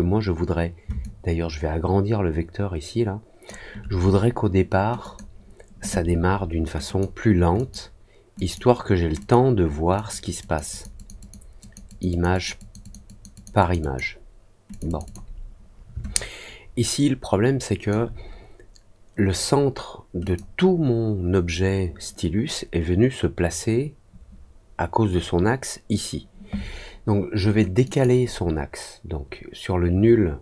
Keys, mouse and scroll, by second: 0.9-3.4 shift+drag, 4.9 click, 6.8 click, 7.5 click, 8.3 click, 9.1 click, 9.9 click, 10.3 click, 10.6 click, 10.9 click, 11.1 click, 11.5 click, 11.8 click, 12.0 click, 12.3 click, 12.5 click, 12.8 click, 13.0 click, 13.3 click, 13.5 click, 13.7 click, 14.6 click, 14.8 click, 15.0 click, 16.1-17.8 alt+drag, 20.2 click.